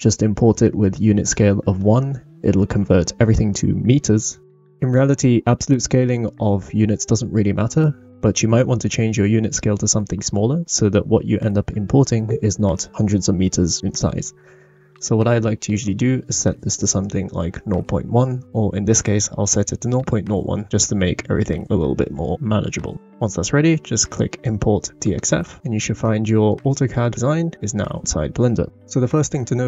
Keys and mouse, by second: 0.1-1.4 drag, 1.4 shift+middle click, 2.4 middle click, 2.9 n, 26.0-26.5 shift+middle drag.